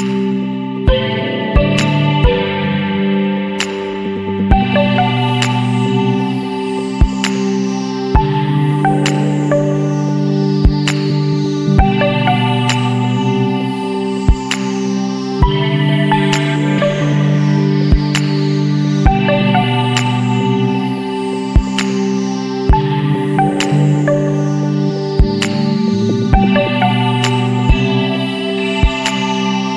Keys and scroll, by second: 0.4 [, 4.6 ctrl+-, 5.5 ctrl+space, 27.3 ctrl+j, 28.8 alt+BackSpace.